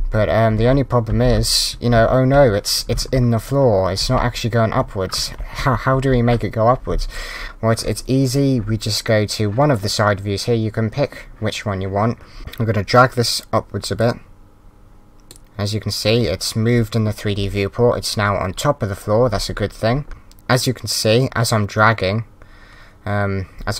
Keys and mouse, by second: 14.0 click.